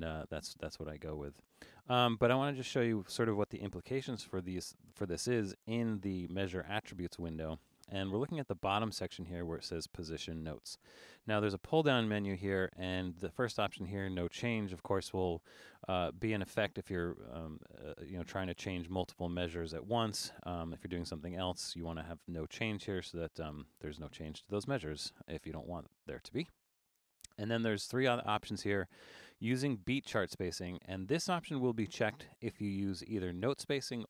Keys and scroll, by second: 5.9 Return.